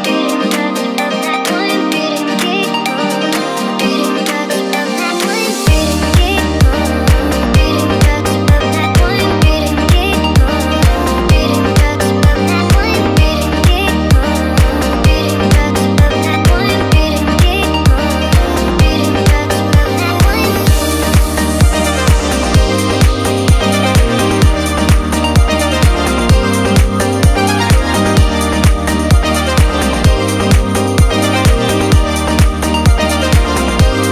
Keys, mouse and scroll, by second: 0.7 click, 0.8 click, 1.5 click, 3.5-4.5 right drag, 4.5-5.0 scroll up 2, 5.0-5.5 middle drag, 5.7 Tab, 6.5 1, 7.2 click, 7.4 middle click, 8.5 shift+click, 8.7 middle click, 9.8 shift+click, 10.0 middle click, 11.3 shift+click, 11.5-13.0 middle drag, 14.1 shift+click, 14.4 middle click, 15.5 shift+click, 15.8-16.8 middle drag, 16.6 scroll down 1, 17.3 shift+click, 17.6 middle click, 18.9 shift+click, 19.1-21.1 middle drag, 21.1-21.5 scroll up 2, 22.0 s, 24.8 click, 25.5 Tab, 26.0 scroll down 2, 26.2-28.6 middle drag, 28.6-29.0 scroll up 1, 29.1 Tab, 29.6 scroll up 1, 30.4 KP_1, 31.4-31.9 shift+middle drag.